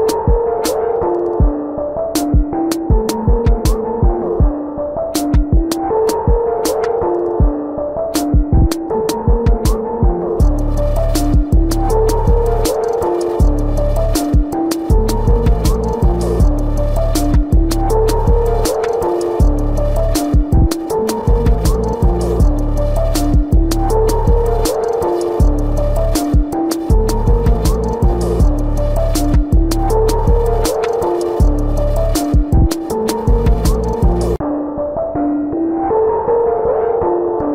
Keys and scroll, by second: 5.0 space, 34.7 ctrl+alt+z.